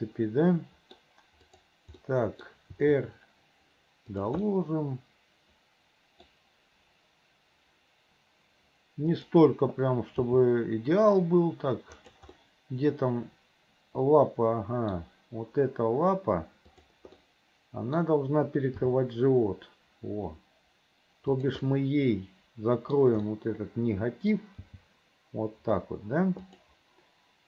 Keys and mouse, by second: 1.6 click, 2.1 middle click, 2.8 r, 4.7-6.4 middle drag, 9.2 click, 10.4 g, 12.5-15.1 middle drag, 16.8 middle click, 17.3 middle click, 18.9 g, 21.9-23.2 middle drag, 23.4-24.5 middle drag, 24.7 g.